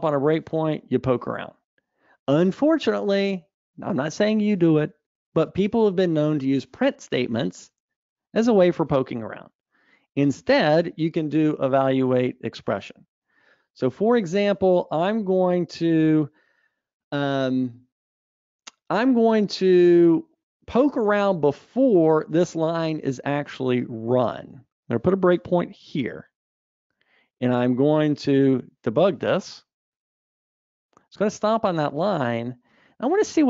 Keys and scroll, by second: 26.4 super+F8.